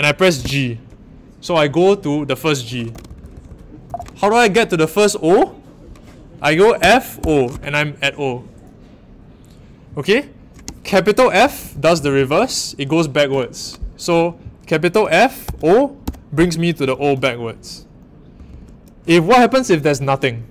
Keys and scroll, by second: 0.3 a, 2.9-3.8 typing, 6.8-7.1 typing, 15.4 shift+f, 16.0 o, 18.3 typing.